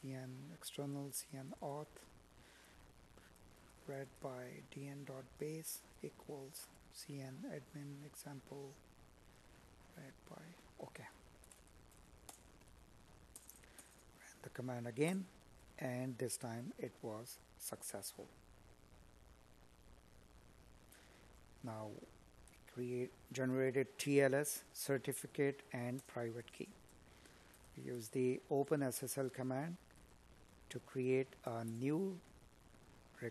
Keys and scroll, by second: 6.0 Up, 21.3 space, 23.1 space, 25.6 space, 29.0 space, 30.9 space.